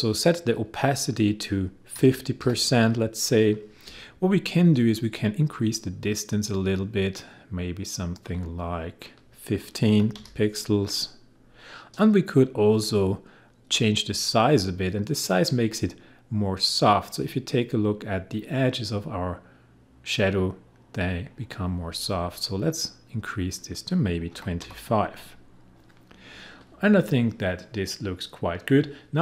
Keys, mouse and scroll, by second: 0.6 click, 1.7-2.9 typing, 2.9 click, 5.5-9.0 drag, 9.8-10.2 typing, 10.6 click, 14.8-23.8 drag, 24.3-24.6 typing, 25.2 click.